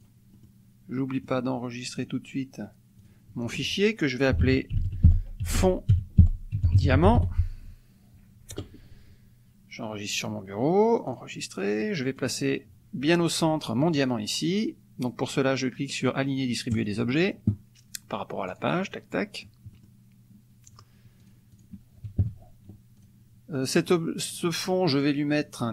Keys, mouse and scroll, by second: 0.0 click, 0.4-1.5 middle drag, 1.9 click, 3.1 click, 4.4-7.9 typing, 11.1 click, 12.2 click, 17.0 click, 18.5 click, 19.7 middle click, 21.2 click, 21.6 click, 22.2 KP_Subtract, 22.9 click.